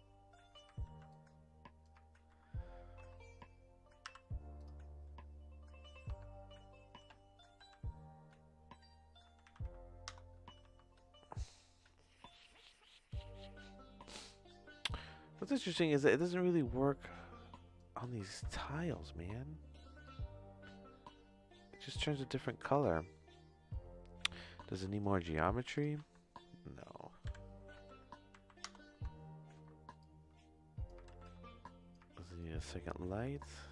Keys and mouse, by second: 0.8 ctrl+z, 1.1 click, 2.2 ctrl+z, 2.9 Tab, 4.0 u, 6.1 Tab, 7.1 Tab, 7.5 r, 10.6 Tab, 17.0 click, 18.3 ctrl+z, 18.8 shift+middle click, 20.1-22.0 drag, 22.2 ctrl+z, 22.5 middle click, 22.8 shift+middle click, 24.7 Tab, 24.9 right click, 26.0 Tab, 27.2 r, 28.9 Tab, 29.6 Tab, 30.0 click, 31.1 ctrl+z, 31.2 ctrl+click, 32.1 ctrl+z, 32.4 click, 33.3-33.7 drag.